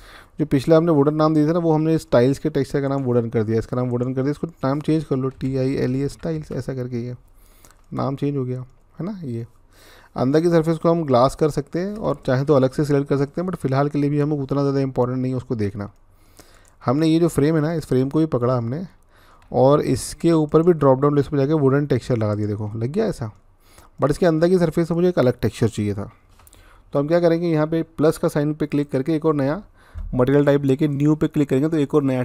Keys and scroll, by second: 5.1-5.8 typing, 6.1 Return.